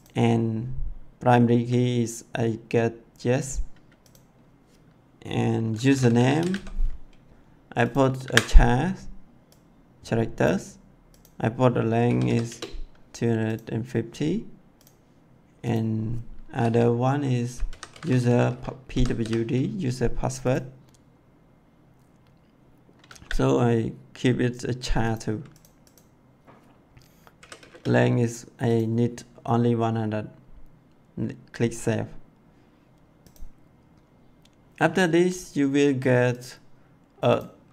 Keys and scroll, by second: 5.5-6.9 typing, 8.1 c, 11.7-12.6 typing, 17.3-19.6 typing, 23.0 c, 27.3 1.